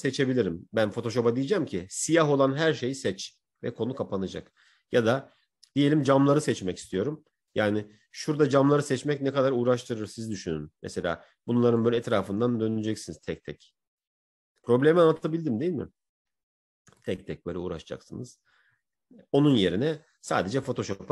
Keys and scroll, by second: 8.4 Right.